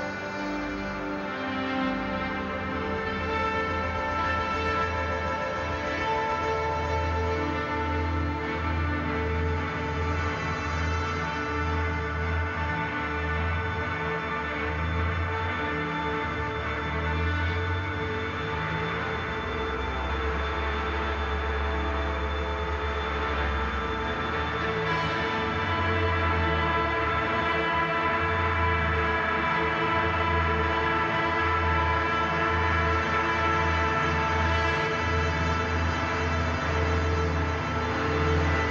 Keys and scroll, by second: 0.0-0.3 typing, 4.5 ctrl+c, 5.7 ctrl+v, 8.0 ctrl+t, 12.8 ], 19.3-23.9 typing, 25.7 ctrl+d, 25.8 [, 27.1 [, 27.3 [, 27.6 ctrl+z, 27.8 ctrl+e, 28.0 ctrl+d, 28.1 [, 29.1 ], 29.4 [, 29.6 [, 30.0 ctrl+z, 30.1 ctrl+e, 30.3 ctrl+z, 30.7 ctrl+c, 31.0 ctrl+v, 32.2 ctrl+z, 32.5 ctrl+t, 32.6 ctrl+t, 33.1 ctrl+t, 33.4 ctrl+d, 33.4 ctrl+e, 33.5 ctrl+j, 35.4 ctrl+z, 35.6 [, 37.2 ctrl+t.